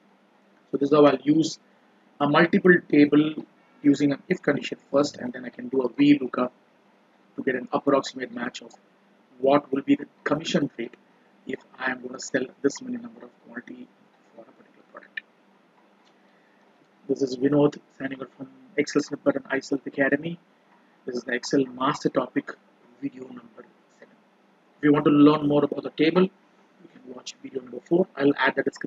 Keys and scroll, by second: 16.3 ctrl+Page_Up.